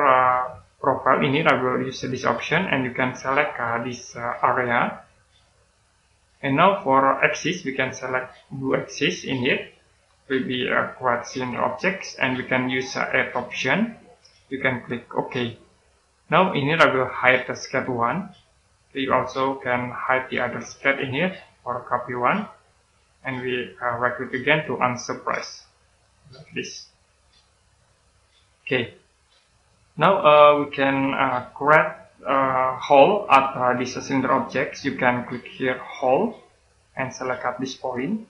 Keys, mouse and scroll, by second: 2.3 click, 9.6 click, 15.1 click, 17.0 right click, 18.2 click, 21.5 right click, 22.6 click, 23.6 right click, 24.7 click, 25.5 right click, 26.3 click, 27.0 right click, 27.8 click, 28.9 right click, 36.4 click.